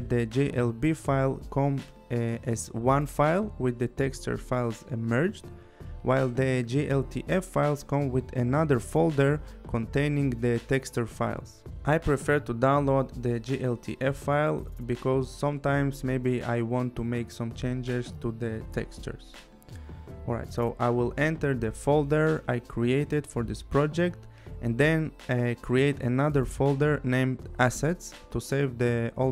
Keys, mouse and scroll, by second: 14.8 click, 19.5 click, 21.5 click, 22.7 right click, 24.8 click, 25.7-26.6 typing, 27.2 Return, 28.4 click.